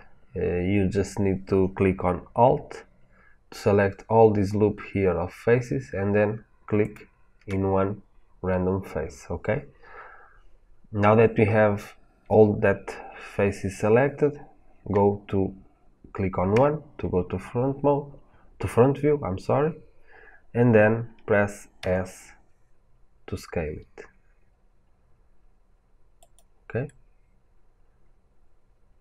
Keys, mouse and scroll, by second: 6.7 alt+click, 10.8-16.4 middle drag, 16.4 KP_1, 20.5-25.7 middle drag, 21.7 s, 26.1 click, 26.8-29.0 middle drag.